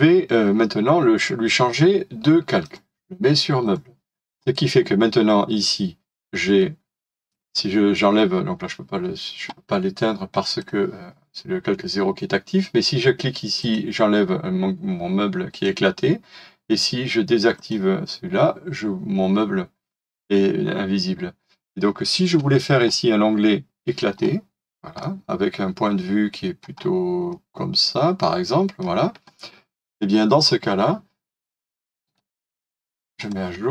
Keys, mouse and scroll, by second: 24.2 scroll up 1, 25.0 middle click, 26.8-27.2 scroll up 1, 27.3 middle click, 27.4-28.5 scroll down 1, 28.6-31.3 scroll up 1, 32.0 right click.